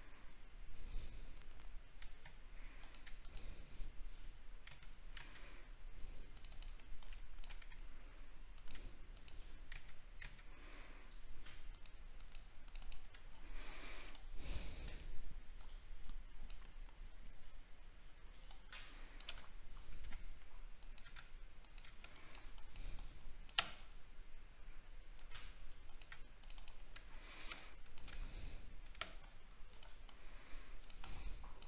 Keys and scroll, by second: 13.2 alt+scroll down 1, 19.5 alt+scroll up 6, 27.0 alt+scroll down 1, 28.1 scroll up 7.